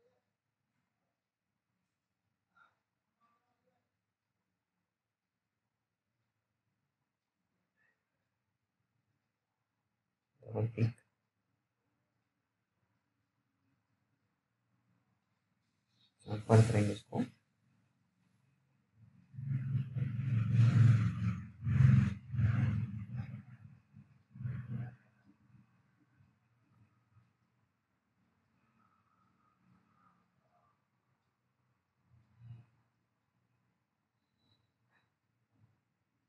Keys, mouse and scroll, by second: 0.6 click, 1.9-3.5 scroll down 1, 3.7 alt+middle click, 4.6-5.7 scroll up 1, 6.0 click, 12.9 click, 16.1 scroll up 1, 18.3 click, 18.3 click, 19.8-21.6 scroll up 1, 21.6 click, 21.6 click, 31.4-32.4 scroll down 1, 32.5 scroll down 1, 32.6 click.